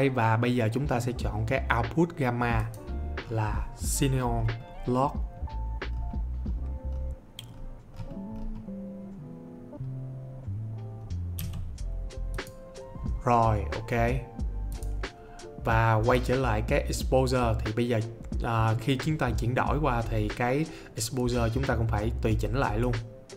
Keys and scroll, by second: 11.4 c.